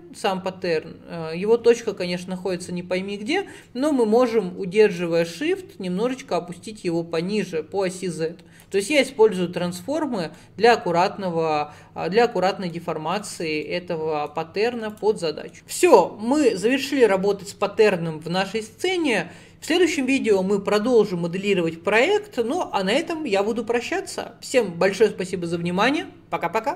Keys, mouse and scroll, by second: 1.4-2.4 scroll up 11, 2.9-3.6 scroll up 2, 3.6-4.0 scroll up 5, 5.3-8.3 shift+drag, 10.4-12.8 middle drag, 12.8-13.2 scroll down 1, 13.2-14.4 shift+middle drag, 14.4-14.9 scroll down 2, 14.9 click, 15.3 middle click.